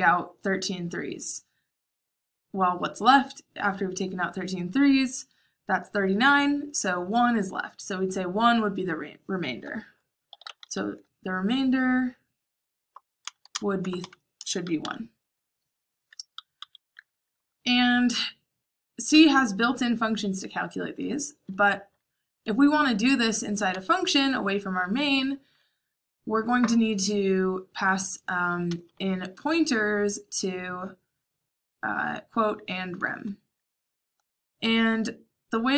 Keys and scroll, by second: 9.9-11.1 typing, 12.7-14.7 typing, 16.5 Escape, 22.1-24.6 typing, 28.4-29.1 typing, 34.7-35.7 typing.